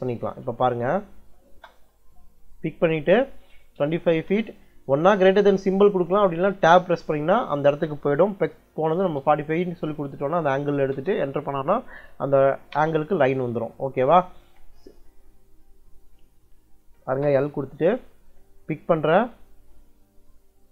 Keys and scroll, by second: 0.3 Escape, 1.0 l, 1.3 space, 3.6 2, 4.1 ', 6.4 Tab, 8.5-9.5 typing, 10.8 Return, 12.4 Escape, 12.5 `, 12.6 Escape, 14.0 Escape, 14.1 `, 14.2 Escape, 16.7 l, 17.0 space.